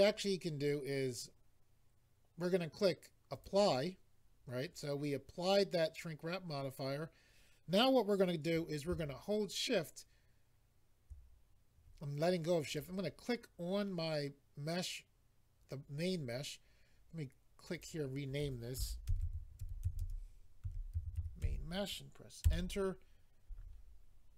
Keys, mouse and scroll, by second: 3.3 click, 12.7 click, 17.7 click, 17.9 click, 18.0 double click, 19.1-21.4 typing, 22.4 Return.